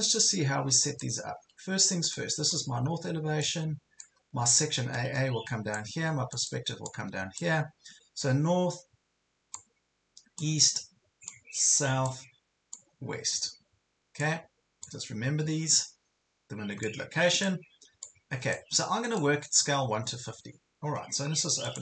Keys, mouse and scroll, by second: 2.0-21.8 drag.